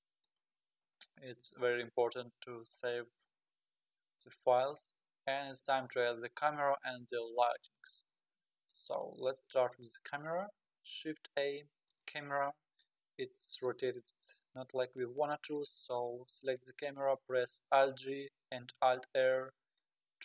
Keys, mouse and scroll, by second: 1.4-2.3 scroll up 3, 2.5 scroll down 1, 3.9-4.2 scroll down 2, 8.3 middle click, 9.0-9.4 scroll up 2, 9.8 middle click, 10.5 shift+a, 12.8-15.9 middle drag, 16.4 click, 17.7 alt+g, 18.8 alt+r, 19.4-19.8 scroll up 7, 19.8-20.2 middle drag.